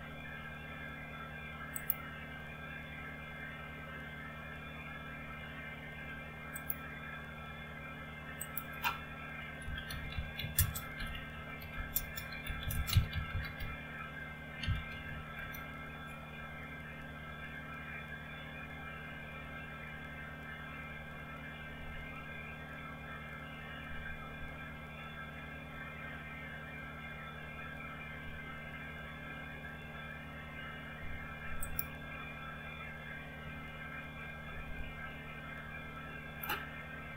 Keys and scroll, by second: 9.5-15.7 typing.